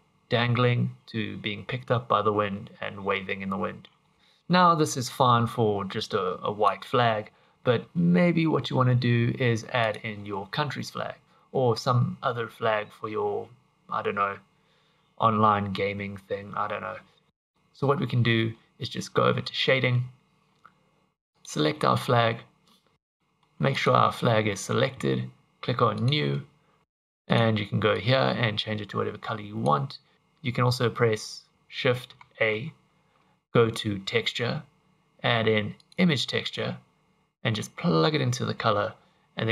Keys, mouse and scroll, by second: 4.1 click, 5.1 click, 7.6-8.1 scroll up 1, 9.8 click, 19.6 click, 21.3 click, 21.9 middle click, 22.6-23.0 scroll up 2, 22.7 middle click, 23.2 middle click, 23.8 click, 23.8 scroll up 1, 24.1 shift+middle click, 26.0 click, 26.8 click, 27.3 click, 37.6 click.